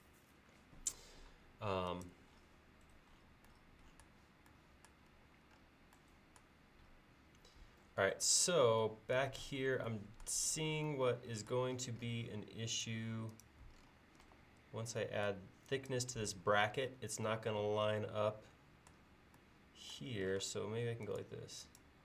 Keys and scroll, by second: 9.5 l, 14.3 e, 20.5 space.